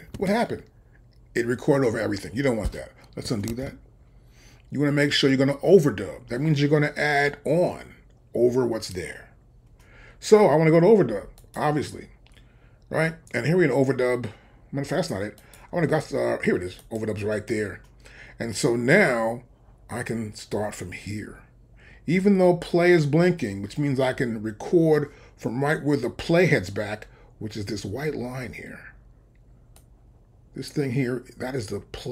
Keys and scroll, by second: 3.5 super+z.